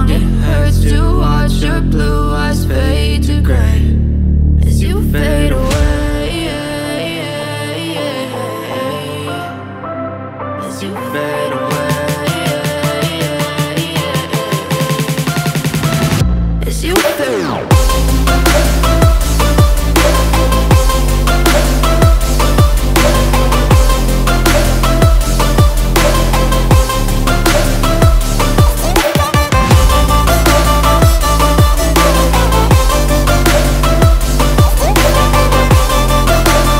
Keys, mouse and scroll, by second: 13.0 ctrl+click, 14.2 ctrl+click, 15.6 ctrl+click.